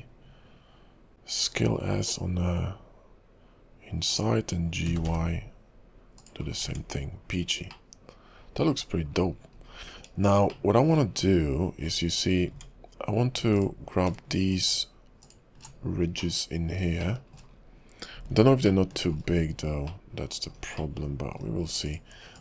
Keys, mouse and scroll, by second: 1.1 ctrl+s, 4.8 g, 6.6-7.9 scroll down 6, 6.9 Tab, 7.9 middle click, 9.2-10.1 scroll up 13, 10.6 shift+middle click, 11.2-12.0 scroll up 4, 12.0-12.5 scroll down 5, 12.5 Tab, 13.6 alt+click, 14.5 alt+shift+click, 15.2 alt+click, 15.8-16.3 scroll down 4, 16.3 middle click, 17.1 shift+middle click, 17.6-18.0 scroll up 6, 18.8 shift+middle click, 19.4-20.0 scroll down 3, 20.0 middle click, 21.0 shift+middle click, 21.8 alt+shift+click, 22.3 alt+shift+click.